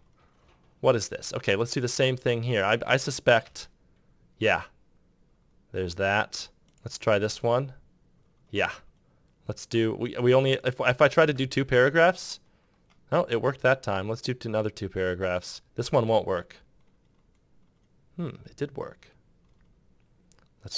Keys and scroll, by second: 3.2 ctrl+Return, 7.0 ctrl+Return, 15.7 Return.